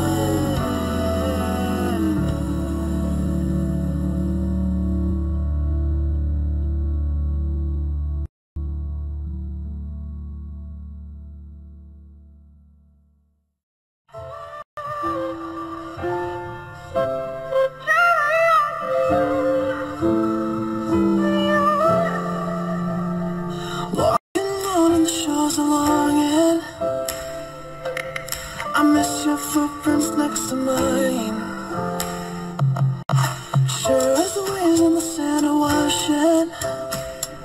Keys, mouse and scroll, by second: 7.7 ctrl+Delete, 23.3 ctrl+j.